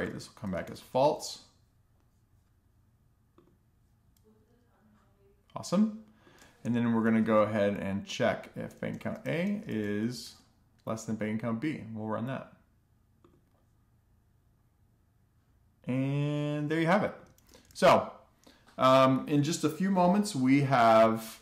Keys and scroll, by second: 5.2 alt+shift+Down, 6.9 BackSpace, 7.4 shift+,, 7.9 alt+shift+f, 8.4 super+s, 15.5 alt+shift+f, 15.8 super+s.